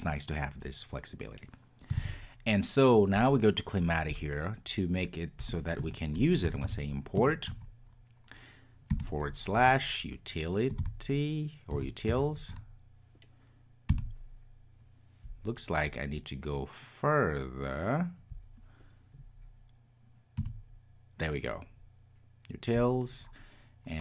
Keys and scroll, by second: 2.0 super+s, 7.2 Return.